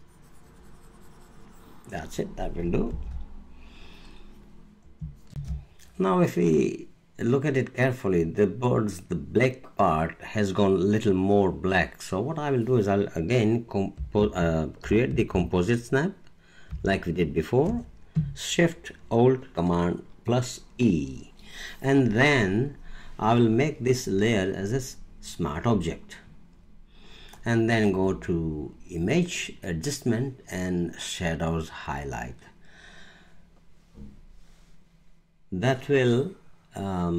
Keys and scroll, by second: 2.9 super+0, 5.3 alt+space, 16.7 alt+shift+super+e.